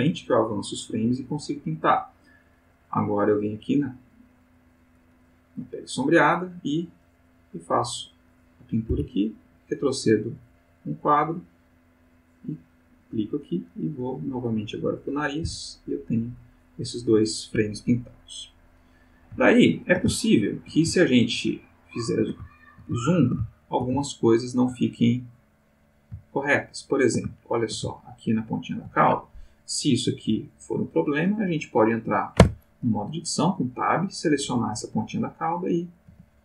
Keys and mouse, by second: 2.5 click, 3.4 click, 4.9 click, 5.6 click, 6.4 click, 6.9 click, 8.1 click, 8.9 Left, 9.8 click, 10.2 click, 11.0 click, 12.0 click, 13.9 click, 14.7 click, 15.4 Right, 16.4 click, 18.6 click, 19.4 ctrl+middle click, 20.2 ctrl+shift+middle click, 20.9-22.4 ctrl+shift+middle drag, 22.5 ctrl+shift+middle click, 23.1-24.8 ctrl+shift+middle drag, 25.6 click, 26.3-27.3 ctrl+middle drag, 27.4-28.8 ctrl+shift+middle drag, 32.4 Tab, 33.6 click, 34.4 g, 35.3 click, 35.9 click, 36.0 g.